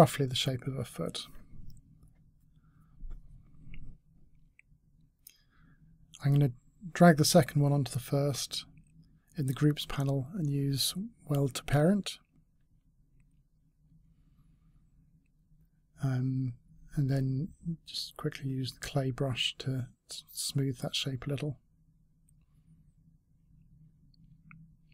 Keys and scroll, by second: 11.5 s, 11.7 s, 12.7 space.